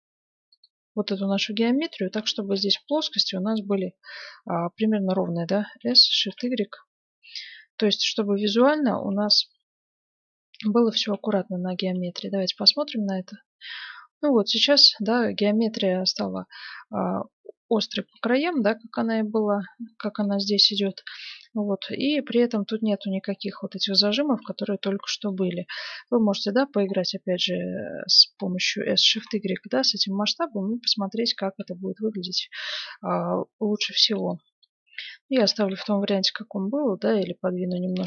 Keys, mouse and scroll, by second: 1.1-4.8 middle drag, 5.7 s, 11.7 Tab, 12.1 middle click, 12.4-14.4 middle drag, 15.7-17.9 middle drag, 18.1-26.3 middle drag, 25.6 Tab, 28.8 s, 29.9 middle click, 35.3 s.